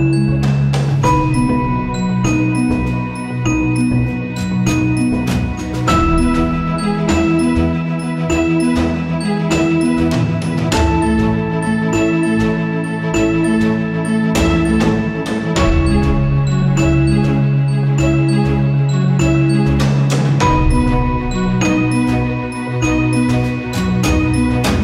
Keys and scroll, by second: 0.3 space, 7.9 ctrl+z, 9.1 ctrl+z.